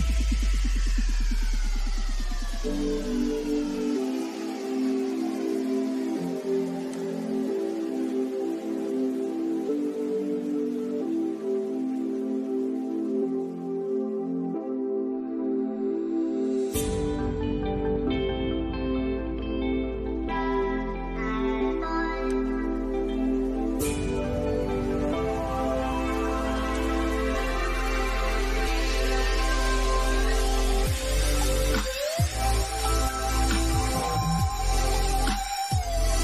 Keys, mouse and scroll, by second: 6.2 click, 6.8-7.2 scroll down 1, 7.4 middle click, 8.5 scroll up 1, 12.2-12.6 scroll down 1, 19.0 scroll up 1, 21.5 click, 22.0-22.4 scroll down 1, 23.3-26.0 middle drag, 26.0 click, 28.5 click, 33.1 click, 34.5-34.9 scroll up 1, 35.4-36.2 middle drag.